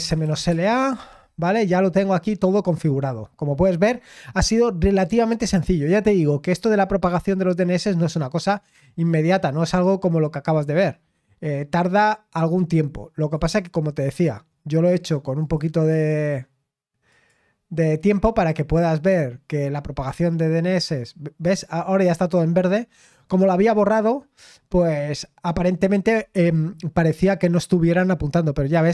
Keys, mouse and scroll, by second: 0.0-0.3 typing, 0.5 Return, 8.3-10.9 drag, 10.9-11.5 scroll down 1, 11.5-13.2 scroll up 1, 13.2 click, 13.4 click, 15.4 click, 17.1 click, 22.3-24.0 scroll down 2, 24.0-24.7 scroll up 2, 24.7-27.5 scroll up 1, 28.5-28.9 scroll down 1.